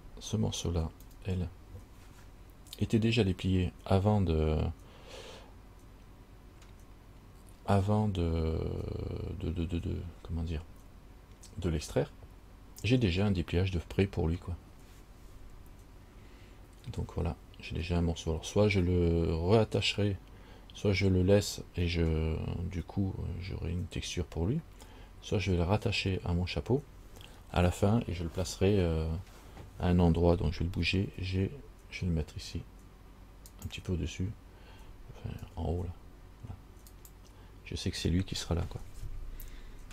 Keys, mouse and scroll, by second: 1.3 l, 31.2 g, 35.6 g.